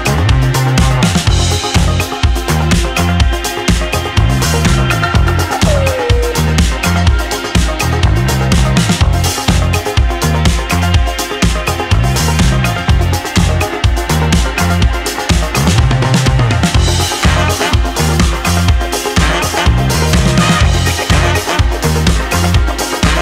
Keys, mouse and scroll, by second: 0.9 alt+s, 4.3-5.6 drag, 5.9 ctrl+z, 7.6 click, 9.0 s, 15.1-16.7 middle drag, 16.9 shift+middle click, 17.4 middle click, 20.0 click, 22.3-22.7 middle drag, 23.0 middle drag.